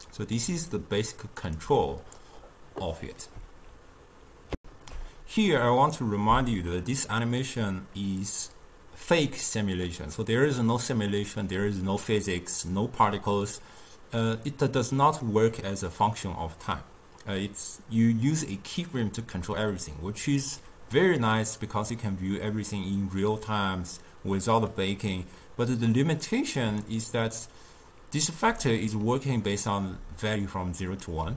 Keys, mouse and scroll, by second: 1.4 click, 1.7-4.6 drag, 4.6 ctrl+alt+shift+q, 15.3-17.9 middle drag, 17.9-20.9 drag, 28.5 d, 28.8-29.8 drag, 29.8 d, 29.9 d.